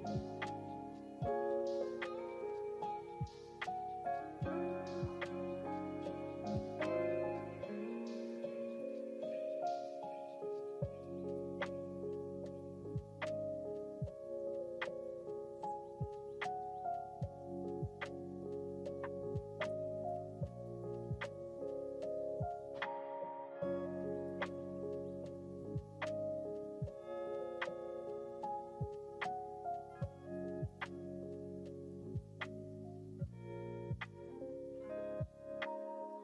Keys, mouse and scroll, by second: 2.0 click, 3.6 g, 11.8 ctrl+z, 13.9 KP_1, 15.4 click, 17.4-18.6 shift+middle drag, 21.0 click, 22.1 click, 23.6 click, 24.4 click, 25.1 click, 26.6 click, 28.5 g, 32.6 click, 35.0-36.0 scroll up 2, 36.1 scroll down 1.